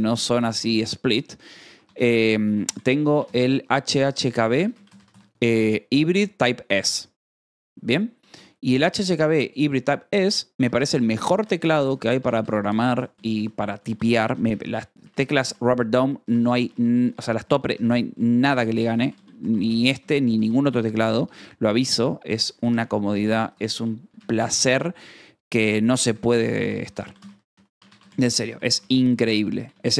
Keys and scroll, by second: 2.6 space, 6.5-9.2 typing, 11.1 a, 11.3 space, 12.8 b, 15.4-16.4 typing, 17.9-20.2 typing, 23.3 t, 23.5 a, 24.5 f, 26.7 Tab, 28.3-29.1 typing.